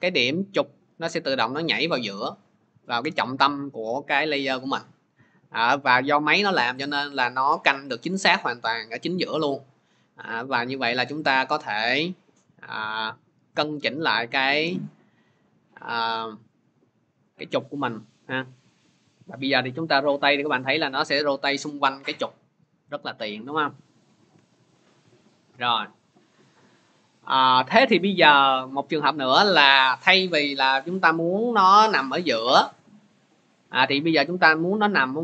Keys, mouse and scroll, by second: 23.6 click, 24.2 ctrl+z, 30.2 ctrl+z.